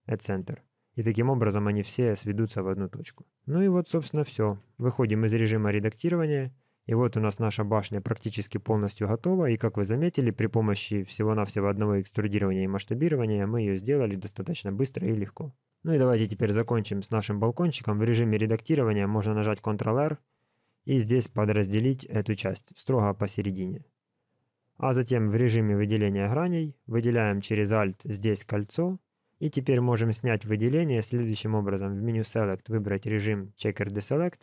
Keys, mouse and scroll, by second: 3.0 KP_1, 4.3 alt+a, 4.8 Tab, 5.1-6.1 scroll down 6, 5.9 middle click, 6.8 shift+middle click, 7.0 scroll up 3, 15.7-16.4 scroll up 4, 16.4 shift+middle click, 17.0 middle click, 17.5 Tab, 18.0 middle click, 19.8 ctrl+r, 26.6 typing, 27.6 alt+click, 29.3 middle click, 32.0 click.